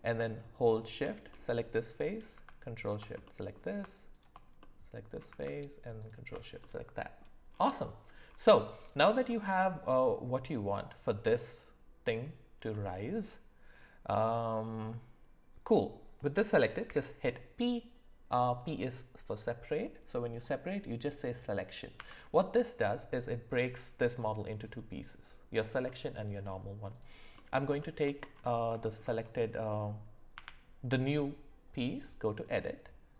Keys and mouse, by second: 0.6 shift+click, 1.3 middle click, 2.8 ctrl+shift+click, 3.2 middle click, 4.6 middle click, 6.0 ctrl+shift+click, 6.6 middle click, 9.3 middle click, 12.7 middle click, 16.8 p, 21.9 Tab, 23.1 click, 23.5 click, 24.7 click, 25.9 middle click, 26.9 click, 27.3 middle click, 27.8 shift+middle click, 28.8 shift+middle click, 30.3 Tab.